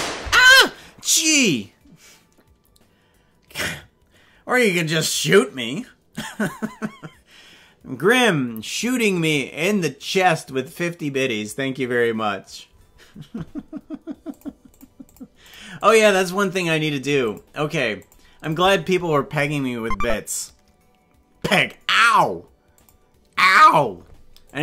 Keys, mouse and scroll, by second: 0.3 space.